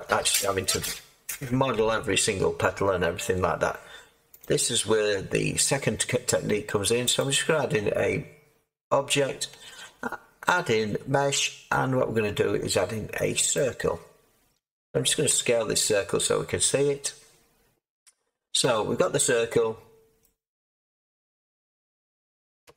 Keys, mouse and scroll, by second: 15.3 s, 22.6 Tab.